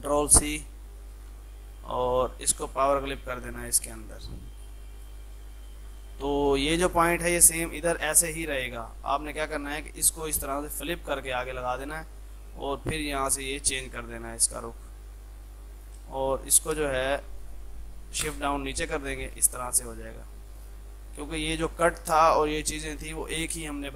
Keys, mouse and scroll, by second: 0.3 ctrl+click, 1.2 ctrl+v, 2.1 right click, 2.9 click, 9.5 click, 11.0-13.1 ctrl+right drag, 13.1 click, 14.6 Left, 15.8 click, 16.1 space, 16.2 alt+click, 17.1 click, 18.3 shift+Page_Down, 19.3 ctrl+click, 21.4 F2, 21.6-23.9 drag.